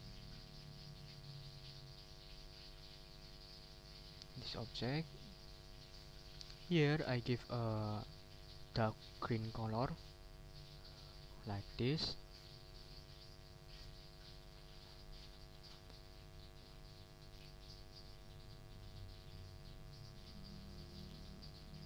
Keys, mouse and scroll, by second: 0.6 click, 1.3 ctrl+z, 3.5 ctrl+click, 4.2 shift+click, 4.7 shift+click, 6.2 click, 10.5 click, 16.4 click, 17.6 ctrl+z, 18.2 ctrl+click, 18.5 ctrl+click, 19.5 ctrl+z, 20.9 shift+click, 21.4 shift+click.